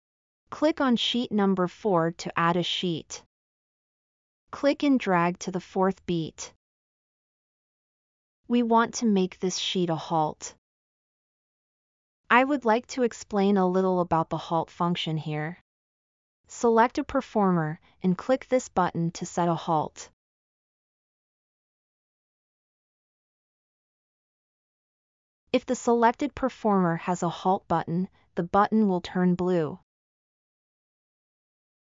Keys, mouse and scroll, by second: 10.0-10.7 scroll up 8, 11.7-12.4 middle drag, 13.4-14.3 middle drag.